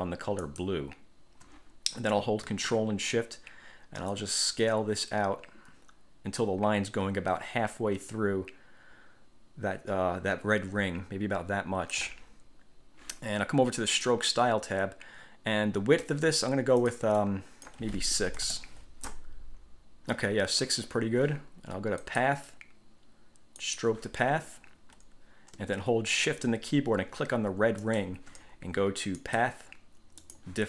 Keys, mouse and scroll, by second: 0.6 shift+click, 4.3-12.3 ctrl+shift+drag, 14.2 click, 16.9 click, 17.3 click, 18.5 6, 18.6 Return, 22.3 click, 23.8 click, 28.0 shift+click, 29.4 click, 30.4 click.